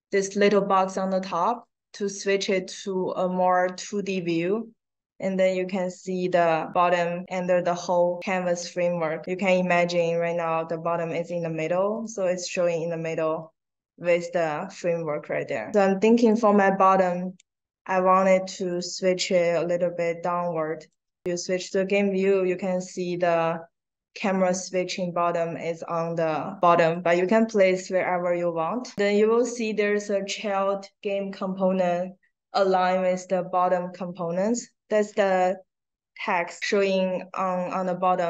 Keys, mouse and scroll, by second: 0.4 click, 3.4 middle click, 3.6 middle click, 4.1 middle click, 4.6 middle click, 5.4 middle click, 5.9-6.7 scroll down 4, 9.8 click, 11.8 click, 13.3 middle click, 13.3-13.9 scroll down 2, 13.7 middle click, 16.1 click, 17.3-18.6 drag, 19.2-20.8 drag, 26.7 click, 35.1 click, 36.0 middle click, 36.0 scroll up 1, 36.5 middle click, 36.5 scroll down 1, 36.9 click, 37.8 click.